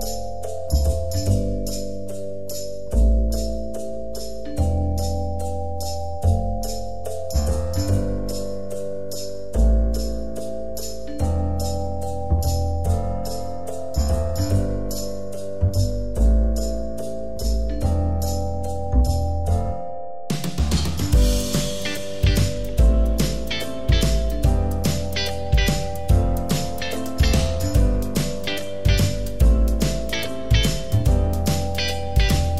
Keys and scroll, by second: 18.2 Right, 18.3 Right, 18.4 Right, 21.7 ctrl+d.